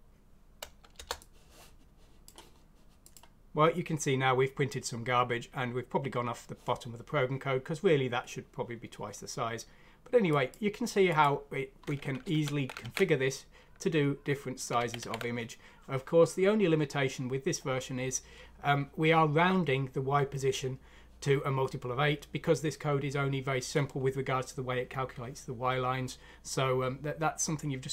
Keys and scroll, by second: 0.9 Return, 12.2 ctrl+z, 12.8 ctrl+z, 14.8 ctrl+z, 15.2 ctrl+z.